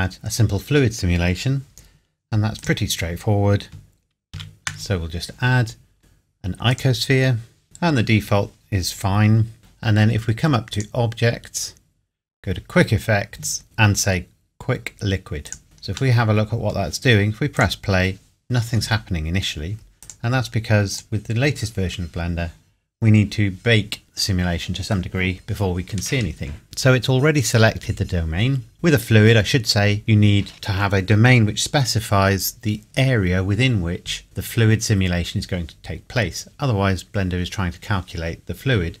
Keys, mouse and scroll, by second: 2.6 click, 4.4 shift+a, 6.0 scroll up 1, 6.7 click, 9.7-10.7 scroll down 1, 10.8 click, 15.5 click, 15.6-16.1 scroll down 1, 16.2 middle click, 17.6 click, 20.0 click, 29.0 scroll up 1, 30.5-31.4 scroll down 1.